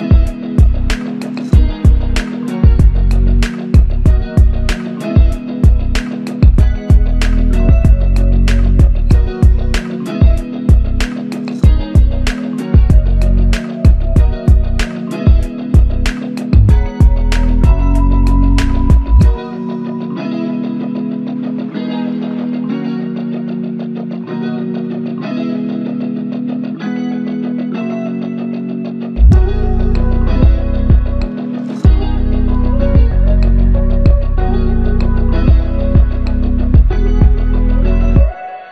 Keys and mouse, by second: 11.8-13.1 typing, 15.6 double click, 20.7 double click, 28.9 ctrl+click, 30.2 shift+double click, 34.2-36.7 typing, 38.0 alt+click.